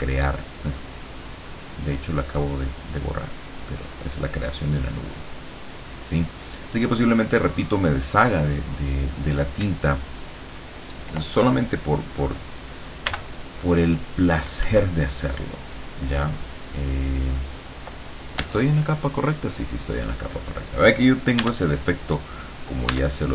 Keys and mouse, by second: 0.4-4.2 drag, 4.6-6.5 drag, 13.2 b, 14.7 Escape, 16.6 click, 18.5 l, 19.9 click, 21.5 e, 23.0 e.